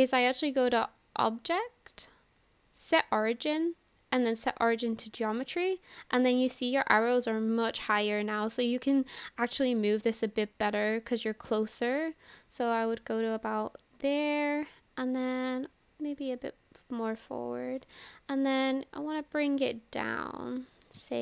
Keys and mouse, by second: 2.1-4.8 drag, 5.3-8.2 middle drag, 8.6-9.0 shift+middle drag, 9.2 middle click, 10.5-13.0 drag, 13.8 middle drag, 13.9-15.6 drag, 13.9-15.6 right drag, 16.8-17.9 drag, 19.0 click, 19.0 right click, 21.1-21.2 drag.